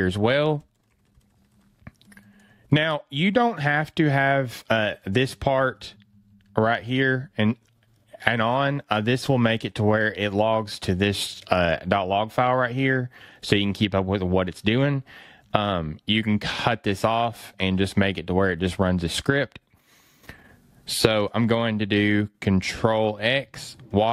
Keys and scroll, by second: 2.6 BackSpace, 3.0 fn+Right, 5.0 fn+Left, 10.5 fn+Right, 12.6 fn+Right, 15.4 fn+Left, 17.1 fn+Left, 23.0 ctrl+x.